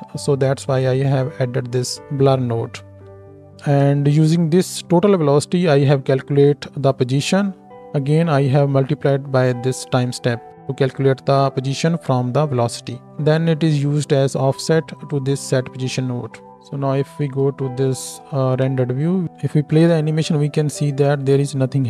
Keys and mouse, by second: 3.7 ctrl+space, 3.8 click, 3.8 right click, 5.9-21.8 drag, 5.9 right click, 16.5 ctrl+space, 16.7 z, 19.2-21.8 middle drag, 19.2-21.8 right drag, 19.2 space.